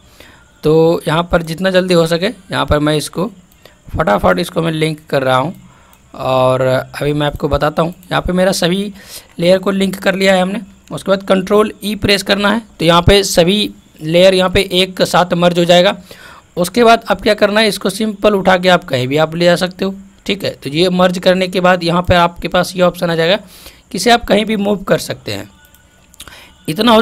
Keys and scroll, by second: 11.8 ctrl+e.